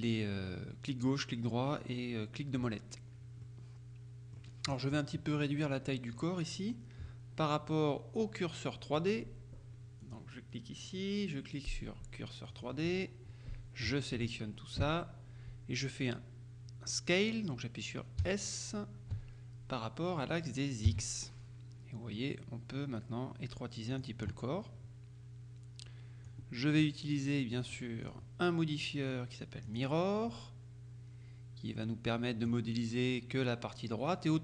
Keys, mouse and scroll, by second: 3.5 scroll down 2, 3.5 middle click, 10.1 click, 12.6 click, 13.0-13.7 scroll up 2, 14.3 a, 18.3 s, 20.9 x, 24.0 click, 26.4-27.4 drag, 27.7-28.7 drag, 29.7 click, 32.1 click.